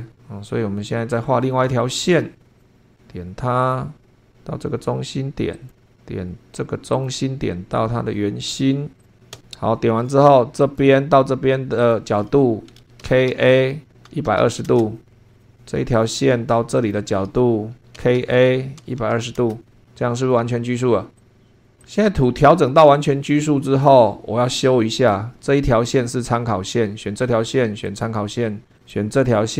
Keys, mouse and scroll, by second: 1.1-1.4 scroll up 2, 1.8 shift+middle click, 2.6 click, 2.7-3.6 scroll up 2, 3.6 click, 4.0 scroll down 2, 4.1 scroll up 2, 4.2-5.5 scroll down 2, 5.5 click, 6.9 click, 9.0 click, 9.3 Escape, 10.6 click, 11.8 click, 13.0-14.9 typing, 15.1 scroll down 2, 15.3 shift+middle click, 15.4 shift+scroll up 2, 15.9 click, 16.8 click, 17.7-19.6 typing, 19.8 scroll down 2, 20.3 shift+middle click, 21.2 click, 21.8-24.0 drag, 24.9 click, 27.8 click, 28.8 click.